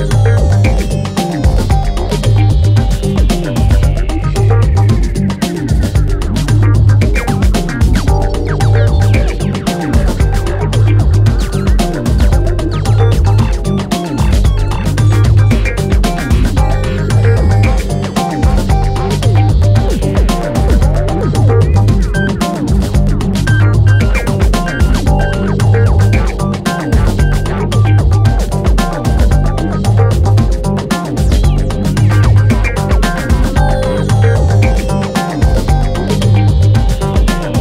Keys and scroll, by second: 1.3 ctrl+z, 5.2 ctrl+z, 8.4 3, 9.4 4, 10.5 3, 11.4 F1, 15.1 ], 17.2 4, 18.7 3, 23.0 4, 28.9 ., 30.0 F1, 30.4 F2, 35.0 F9, 36.2 3.